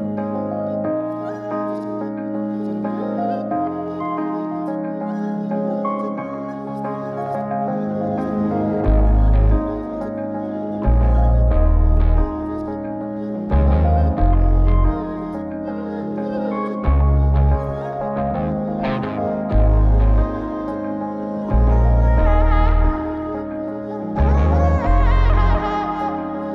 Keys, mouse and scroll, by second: 4.5 click, 6.3-8.4 drag, 11.0 click, 19.6 click, 20.7 click, 23.8 click, 24.6-26.0 scroll up 3, 26.0-26.5 middle drag.